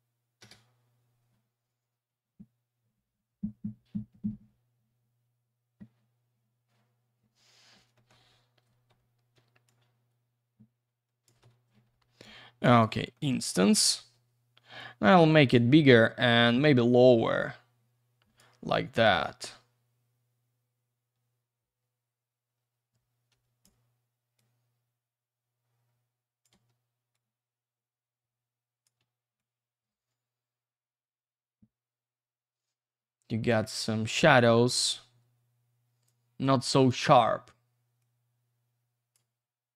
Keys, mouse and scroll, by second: 0.6 Return, 7.9 middle click, 8.9 w, 9.7 shift+click, 11.4 F3, 12.7 click, 13.1 middle click, 13.3 double middle click, 13.5 F3, 14.1 r, 14.8 click, 16.2 click, 18.4 w, 19.2 click, 23.3 Escape, 24.3 click, 27.1 click, 29.3 shift+click, 34.7 click, 36.1 click, 38.0 click.